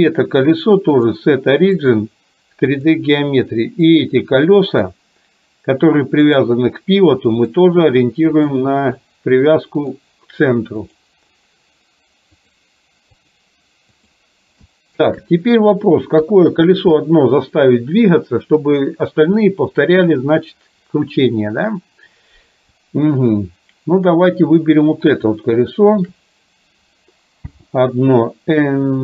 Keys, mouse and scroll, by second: 0.0 click, 1.0-3.0 drag, 4.5 middle click, 6.3-8.7 drag, 9.0-10.0 middle drag, 12.4-14.2 drag, 14.8-15.2 shift+middle drag, 16.2 KP_3, 24.7 click, 25.4-26.2 shift+middle drag, 27.5 n.